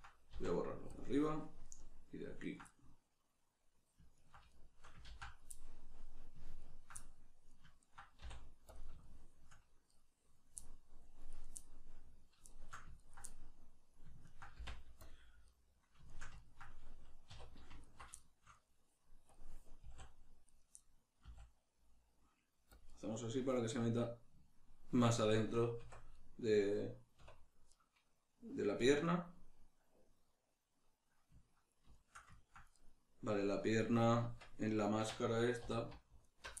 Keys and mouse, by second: 1.7 right click, 2.4 ctrl+right click, 2.7-4.2 middle drag, 4.2 ctrl+right click, 4.5-6.6 shift+middle drag, 5.1 ctrl+z, 6.6 ctrl+right click, 7.0 middle click, 7.8 ctrl+right click, 8.2 x, 9.0 shift+middle click, 9.9 right click, 11.3 right click, 12.5 shift+middle click, 12.9 ctrl+right click, 13.3-14.3 middle drag, 14.3 ctrl+right click, 14.5 x, 15.5-17.8 middle drag, 17.3 2, 17.8 alt+right click, 18.1-19.3 shift+middle drag, 19.3 click, 19.8 s, 20.6 right click, 21.2-22.8 middle drag, 21.2 s, 22.8 click, 22.9-32.8 middle drag, 25.8 Tab, 27.2 \, 32.8 right click, 34.2 Tab, 36.2 alt+right click.